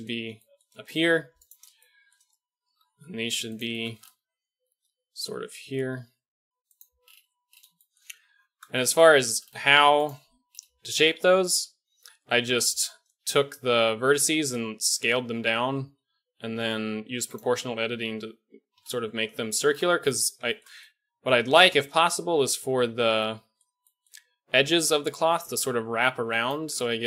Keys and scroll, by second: 2.8 alt+g, 4.1 g, 8.2 Tab, 9.0 Tab, 12.3 KP_1, 14.2 s, 17.8 KP_Decimal, 18.7 KP_Decimal, 25.3 d.